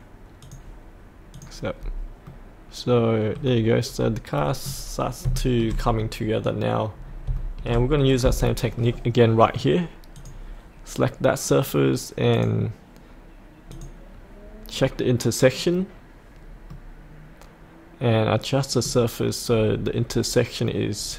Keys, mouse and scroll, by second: 1.8-2.2 scroll up 1, 2.2 middle click, 3.3-5.2 scroll down 1, 5.3 shift+middle click, 6.9-7.2 scroll up 1, 7.3 shift+middle click, 7.9-8.4 scroll down 1, 8.4 middle click, 10.1 click, 14.7-15.0 scroll up 1, 16.7-19.0 middle drag, 19.5-20.1 scroll down 1.